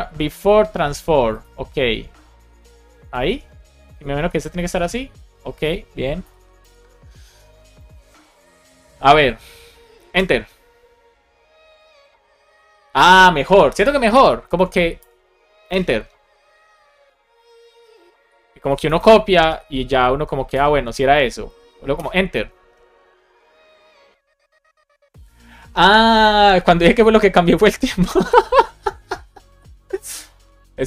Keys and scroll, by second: 2.4 alt+Up, 3.0 super+s, 3.7 Down, 4.2 alt+Up, 4.5 super+s, 6.1 alt+shift+f, 6.5 super+s, 10.1 Return, 14.4 Escape, 14.9 Return, 19.4 BackSpace, 19.9 BackSpace, 20.4 Return, 21.8 Return.